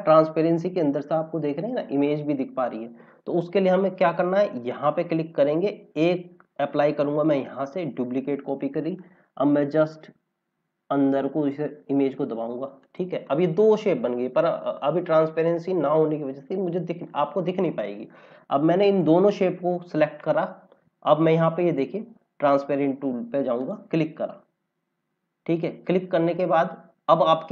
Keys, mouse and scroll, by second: 2.0 scroll down 1, 2.5 scroll down 1, 3.9 click, 7.3 click, 23.5 click.